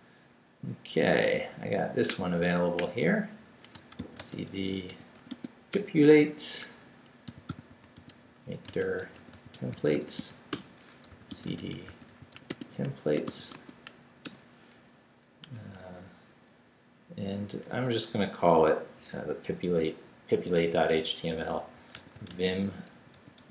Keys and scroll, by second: 3.5-5.6 typing, 5.7 Return, 7.0-13.2 typing, 13.5 Tab, 14.2 Return, 21.5-23.5 typing.